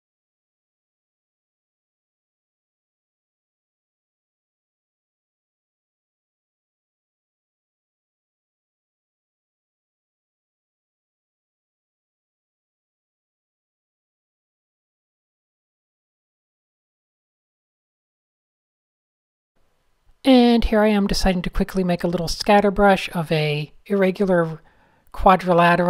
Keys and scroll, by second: 1.3 super+z, 1.8 super+z, 1.9 super+z, 2.0 super+z, 2.0 super+z, 2.1 super+z, 2.2 super+z, 5.6 shift+super+a, 16.6-18.6 typing, 17.9 alt+shift+super+r, 19.6 super+space, 19.7 super+space, 20.3-22.4 typing, 23.6-25.2 typing.